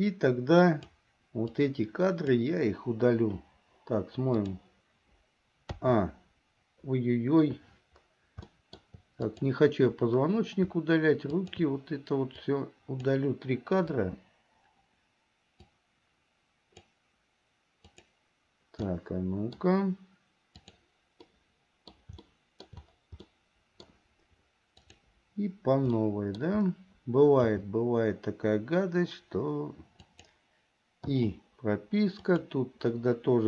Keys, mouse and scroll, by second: 1.7 click, 4.5 click, 5.9 a, 8.7 shift+middle click, 9.4 click, 11.4 shift+click, 12.6 click, 14.1 Delete, 15.8-17.1 drag, 18.1 click, 19.0 middle click, 20.7 click, 21.4 middle click, 22.3 shift+middle click, 23.4 middle click, 24.9 click, 26.1 middle click, 27.7 g, 31.3 i, 32.4 click.